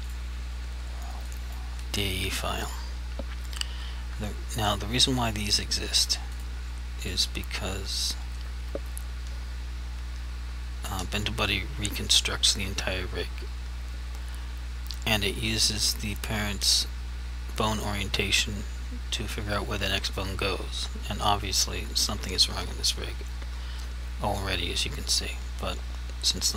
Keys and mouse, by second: 0.1 click, 1.4 click, 5.2 click.